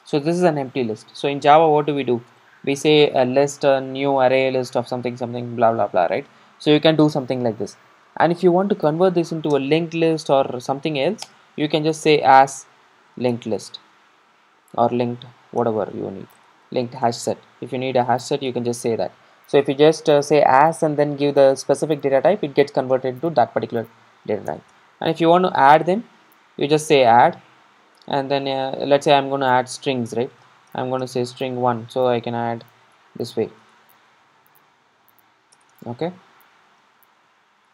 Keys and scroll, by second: 15.7 Return, 27.2 Return, 32.8 super+d.